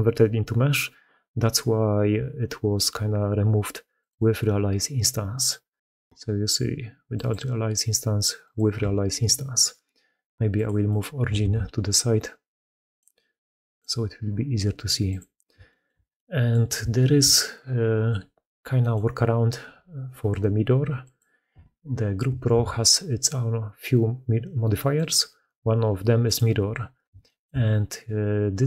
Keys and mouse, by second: 3.8 middle click, 5.2 middle click, 7.0 middle click, 8.3-9.7 middle drag, 10.7 middle click, 11.3 ctrl+x, 14.9 middle click, 15.5 shift+middle drag, 16.0-16.4 middle drag, 16.8 shift+middle drag, 18.6 middle click, 20.9-21.9 middle drag, 22.4 ctrl+x, 27.1 shift+middle click.